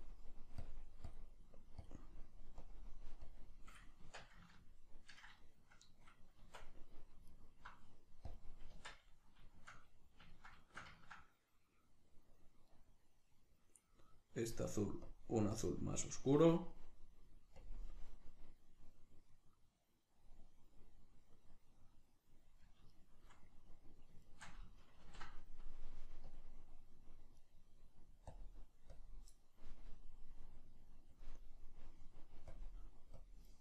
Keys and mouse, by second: 0.0-4.0 drag, 4.0 Tab, 4.6-7.3 ctrl+middle drag, 6.4 Tab, 7.3 alt+right click, 8.3-9.6 drag, 8.8 Tab, 9.6-12.7 shift+middle drag, 12.7 right click, 15.1-19.4 drag, 19.4 right click, 23.0-24.2 shift+middle drag, 24.2 shift+right click, 25.0 ctrl+l, 27.4 right click, 28.3-32.4 drag, 32.5-33.6 drag.